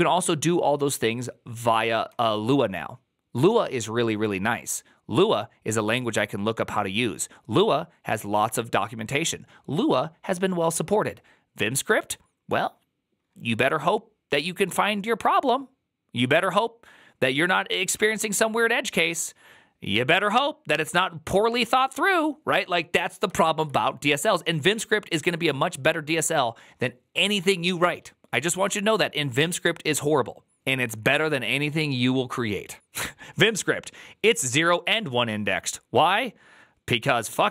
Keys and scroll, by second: 1.9 k, 23.3 alt++.